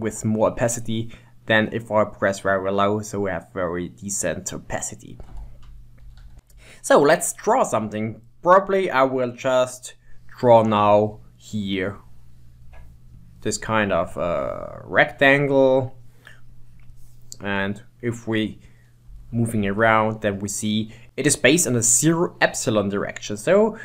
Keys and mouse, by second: 2.6-5.6 drag, 6.1 ctrl+z, 9.9-17.6 drag, 17.6-21.0 middle drag, 23.6 middle click.